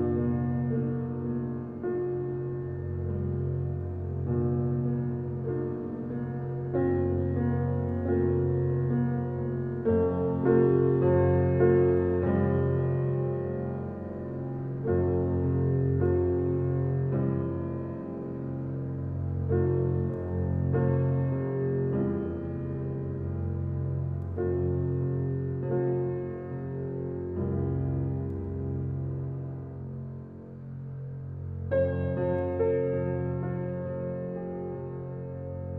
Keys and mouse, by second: 0.6 click, 5.1-6.2 drag, 6.6 click, 9.2-9.6 drag, 10.1 click, 11.0 click, 12.1 click, 13.7 click, 14.6 click, 16.1 click, 16.8 click, 17.7 click, 18.7 click, 19.3 click, 19.7 click, 19.9 click, 21.1-22.2 drag, 23.6 shift+click, 25.3 click, 26.3-29.2 drag, 31.2-33.1 drag, 33.9 click, 34.4 click.